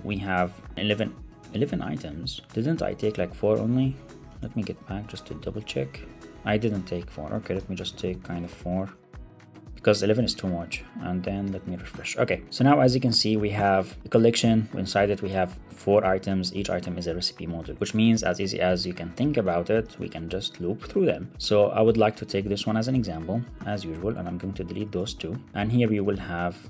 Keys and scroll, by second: 4.3 ctrl+Tab, 4.9 ctrl+Escape, 5.4 ctrl+Tab, 6.9 super+Right, 7.2 Return, 8.7 super+Right, 9.0 alt+super+l, 9.2 super+s, 11.3 super+r, 12.9 super+=, 13.4 super+=, 19.9 ctrl+Tab, 22.2 super+Left, 22.5 alt+Up, 22.8 super+x.